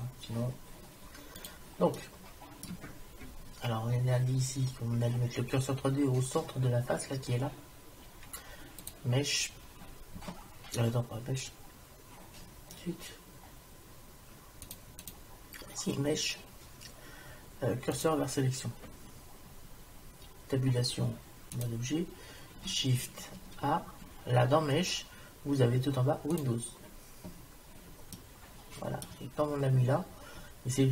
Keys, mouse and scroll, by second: 1.4 click, 2.0-3.2 middle drag, 8.9-10.7 drag, 14.7-16.3 drag, 20.6 Tab, 23.4 shift+a, 28.2 middle click, 29.0 middle click, 29.7 middle click.